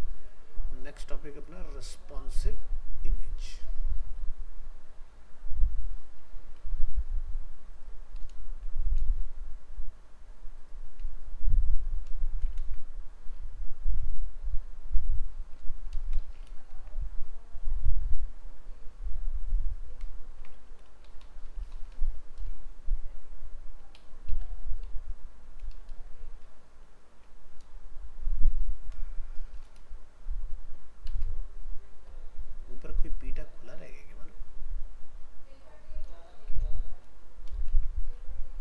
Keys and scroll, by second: 12.6 ctrl+c, 16.5 ctrl+v, 37.7 ctrl+s.